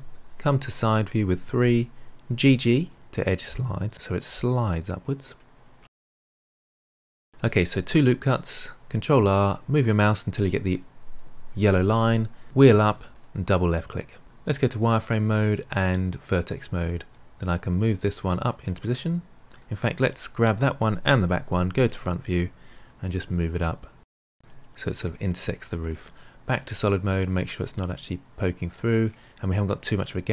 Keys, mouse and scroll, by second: 0.8 KP_3, 2.3 g, 5.7-6.8 middle drag, 7.2-8.0 middle drag, 8.0 ctrl+r, 13.9 middle click, 14.6 click, 16.1 click, 16.8 click, 18.0-20.0 middle drag, 20.0 shift+drag, 21.4 KP_1, 23.0 g, 24.4-25.4 middle drag, 25.4 Tab, 26.6 click, 27.2-30.3 middle drag.